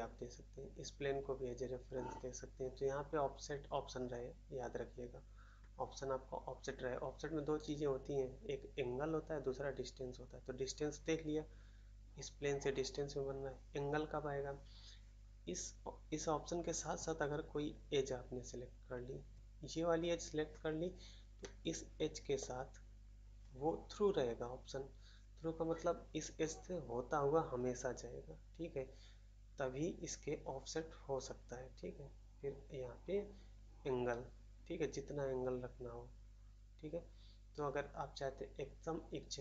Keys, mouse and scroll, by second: 21.4 middle click, 22.3 middle click.